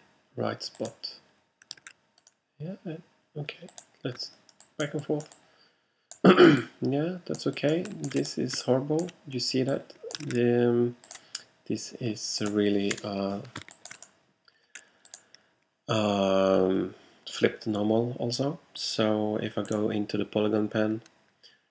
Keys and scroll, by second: 1.9 super+z, 10.3 super+z, 13.0 BackSpace, 13.6 alt+BackSpace.